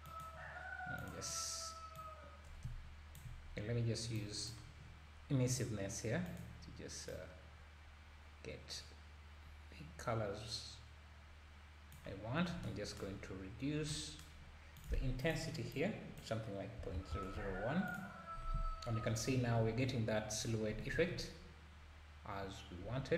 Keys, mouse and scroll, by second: 1.0 click, 1.9-6.4 drag, 14.8-17.1 drag, 17.1 KP_0, 17.9 KP_0, 19.0 scroll down 1, 20.7 s.